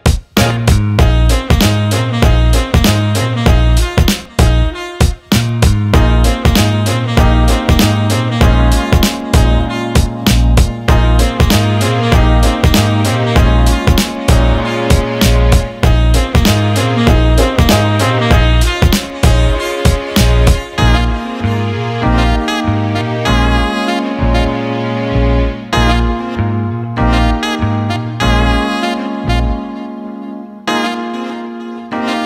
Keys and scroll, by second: 4.6 Escape.